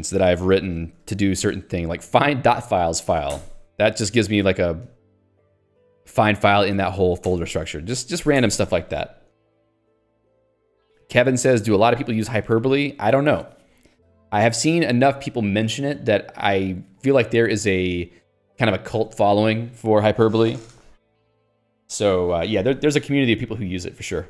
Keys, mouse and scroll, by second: 1.9 ctrl+k, 3.8 Return, 8.3 ctrl+g.